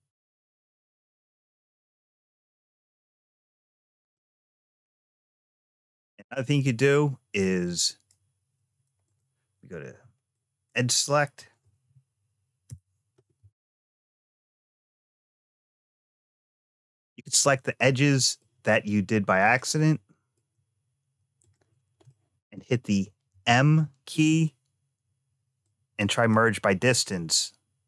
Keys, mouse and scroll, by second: 1.0 click, 1.9-2.5 scroll down 2, 2.5-3.3 scroll up 2, 3.3 scroll down 1, 3.9 scroll up 1, 4.0 middle click, 5.7-6.8 middle drag, 7.5 click, 8.9 click, 9.7 2, 10.1 click, 12.5 n, 13.8 click, 14.9 shift+click, 15.8 scroll down 2, 17.6 middle click, 19.2 shift+click, 19.7 middle click, 21.2 shift+click, 21.9 shift+middle click, 23.1 m, 26.8 click, 27.2 middle click.